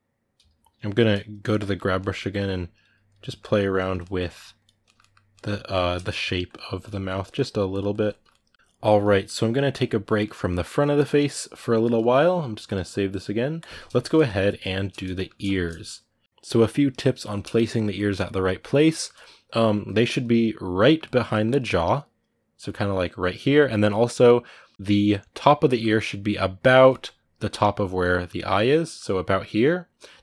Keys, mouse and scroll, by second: 0.2 g, 0.3 f, 1.5 ctrl+middle click, 2.2 click, 3.0-4.4 middle drag, 4.4 click, 4.6-6.0 ctrl+middle drag, 6.0 click, 6.8 ctrl+middle click, 7.5 click, 7.7-30.2 ctrl+middle drag.